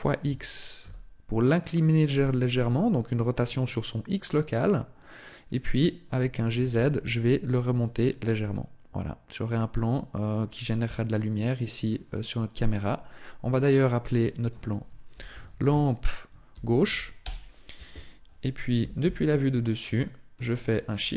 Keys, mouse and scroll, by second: 5.3 click, 6.3 g, 7.6 click, 7.8 middle click, 13.9 click, 18.6 KP_7, 19.8 shift+middle click, 20.7 shift+d.